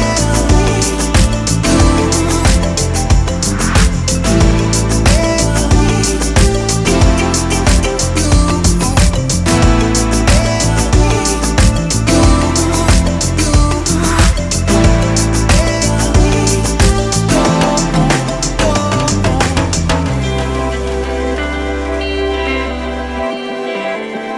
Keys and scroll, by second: 1.5 Escape, 1.6 d, 2.0 1, 2.1 Return, 3.1 Escape, 4.1 d, 4.4 1, 4.6 Return, 4.9 Escape, 6.6 5, 6.9 BackSpace, 7.0 5.